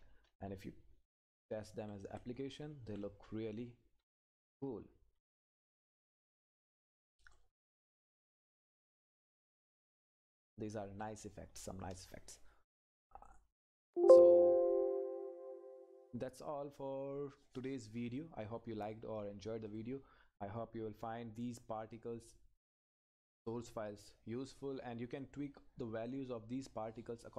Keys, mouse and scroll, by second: 1.3 Up, 1.9 Right, 2.5 Up, 7.3 Right, 9.7 Down, 13.7 click, 19.7 click, 22.8 click, 25.1 click.